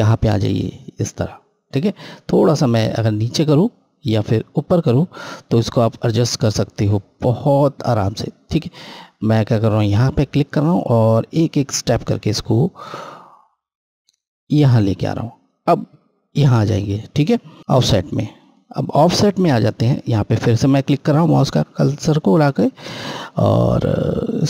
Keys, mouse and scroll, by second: 2.2 click, 12.0 Down, 18.8 click, 23.9-24.4 scroll down 1.